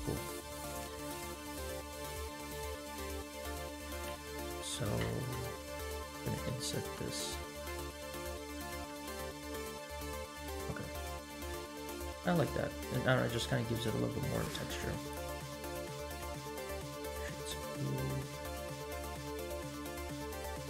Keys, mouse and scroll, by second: 1.9 click, 2.7 click, 3.9 click, 4.3 2, 4.7 3, 5.1 alt+click, 5.5 middle click, 6.5 alt+e, 9.1 Tab, 10.1 Tab, 11.5-11.8 scroll down 1, 11.8 Tab, 12.1-13.1 middle drag, 13.6-15.3 right drag, 15.7 middle click, 16.0-17.2 right drag, 17.2-17.6 middle drag, 17.8 scroll down 1, 18.1 middle click, 18.6 scroll down 2, 18.9-19.9 middle drag, 20.5 scroll up 1.